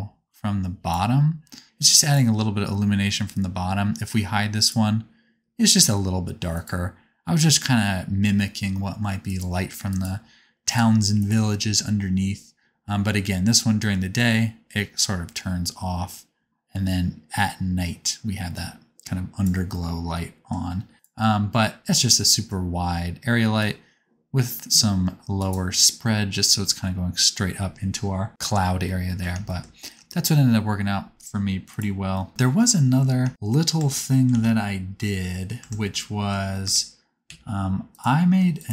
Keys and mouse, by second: 2.1-4.5 middle drag, 4.5 click, 4.6-6.5 middle drag, 6.5 click, 6.6-9.2 middle drag, 9.2 click, 9.3 middle click, 9.8 click, 10.0 middle click, 10.6 click, 10.7 middle click, 11.1 click, 11.2-13.7 middle drag, 13.7-22.1 drag, 20.9 g, 23.5-25.5 drag, 29.6-33.8 shift+middle drag, 33.8 Tab, 34.2 alt+z, 35.6 Tab, 36.6 Tab, 37.3 1, 38.5 shift+click.